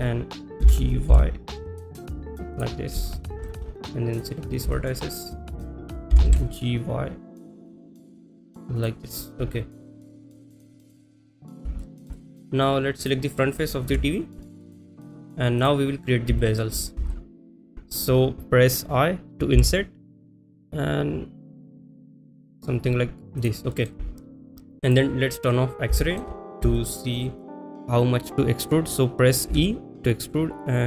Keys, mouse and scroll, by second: 2.6 click, 2.6 g, 2.6 y, 3.5 shift+middle drag, 3.9 click, 4.8 shift+middle click, 6.5 g, 6.5 y, 8.8 click, 9.8 middle click, 11.3 click, 11.9 shift+middle click, 12.2 middle click, 13.0 click, 13.9 KP_1, 14.6 click, 15.6 click, 16.4 shift+middle click, 17.2 shift+middle click, 22.0 i, 23.8 middle click, 25.0 click, 25.4 middle click, 26.1 shift+middle click, 26.8 shift+middle click, 27.5 middle click, 29.6 e.